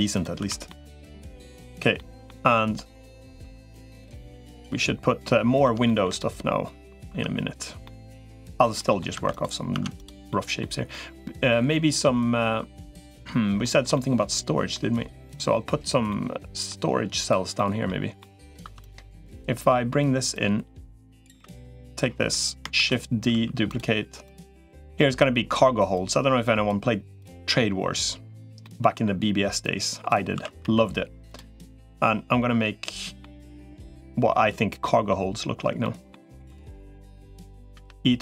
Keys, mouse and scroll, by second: 0.2 Tab, 0.5 middle click, 1.8 middle click, 3.4 3, 4.3-5.4 middle drag, 5.6 shift+middle click, 6.0 middle click, 7.0 Tab, 7.6 middle click, 8.2 Tab, 8.5 middle click, 9.0 Tab, 9.6 Tab, 10.1 middle click, 10.7-13.1 middle drag, 13.4 shift+middle click, 13.7 middle click, 15.9 middle click, 17.0 click, 17.3 middle click, 18.0 middle click, 18.6 click, 18.6 2, 19.1 middle click, 20.2 click, 21.2 3, 21.6 middle click, 22.6 shift+d, 23.2 s, 24.0 click, 24.8 middle click, 25.8 click, 27.2-28.2 drag, 28.4 middle click, 29.4 click, 30.2 s, 31.3-33.0 middle drag, 33.6 click, 34.6 middle click, 35.6 middle click, 36.0 shift+middle click, 37.0 click, 37.6 e.